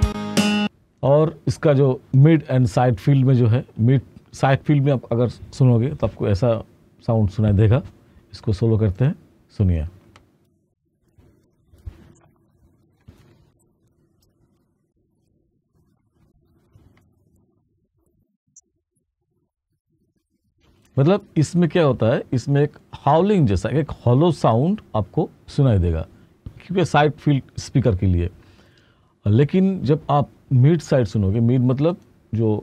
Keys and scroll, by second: 0.0 space, 9.8 space, 13.1-15.7 typing, 20.6 space.